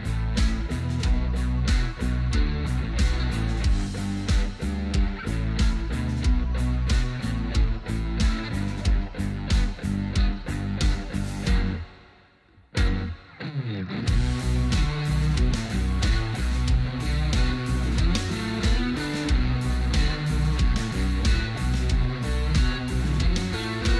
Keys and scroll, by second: 1.0 ctrl+alt+space, 3.5 Down, 3.8 Down, 4.0 Down, 4.3 Down, 6.6 ctrl+alt+space, 7.1 alt+space, 7.1 alt+space, 11.0 ctrl+alt+space.